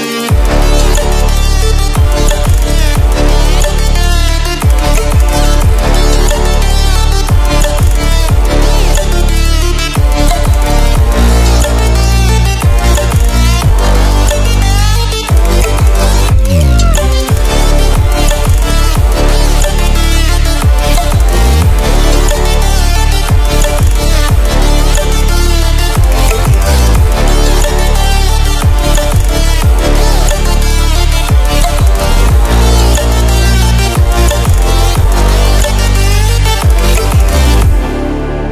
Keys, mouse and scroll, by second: 7.6 ctrl+alt+scroll down 1, 8.5-9.1 ctrl+alt+scroll down 1, 9.6 ctrl+alt+scroll up 1, 10.6 ctrl+alt+scroll up 1, 12.4 click, 13.3-14.2 alt+click, 14.4-14.9 ctrl+alt+scroll up 2, 15.3 click, 16.5 ctrl+a, 19.0-20.6 typing, 21.8 click, 22.6 ctrl+alt+scroll down 1, 23.1 ctrl+alt+scroll up 1, 25.4-26.3 alt+shift+drag, 28.9 scroll down 1, 29.7 click, 35.3-36.8 drag, 37.6 ctrl+z.